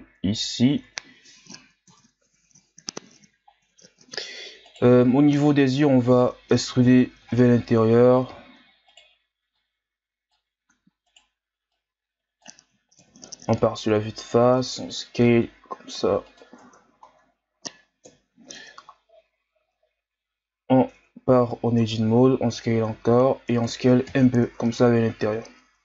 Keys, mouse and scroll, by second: 0.7 Tab, 1.9 KP_1, 2.9-3.5 scroll down 1, 3.5-4.0 scroll up 2, 4.0 Tab, 4.6 alt+right click, 6.8 KP_3, 7.6-8.4 shift+scroll up 2, 8.4 e, 9.5-10.8 drag, 10.8 e, 11.7-13.0 drag, 13.0 KP_1, 14.0 s, 16.6 Tab, 17.1-18.0 scroll down 1, 18.0 KP_3, 18.9-19.7 scroll up 2, 19.7 z, 20.2-20.7 scroll up 2, 20.9 Tab, 22.0 e, 24.1 KP_1, 24.4 Tab, 25.2 z, 25.5-25.8 scroll down 4.